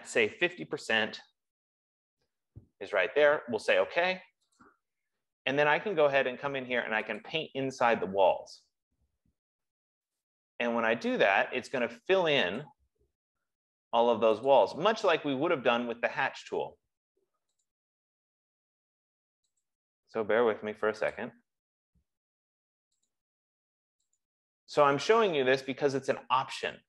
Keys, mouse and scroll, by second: 0.4-1.3 typing, 1.8 Tab, 5.0 click, 7.5 click, 10.8 click, 13.1 click, 14.9 click, 16.7 F15, 18.1 click, 20.0 click, 21.5 click, 23.6 click.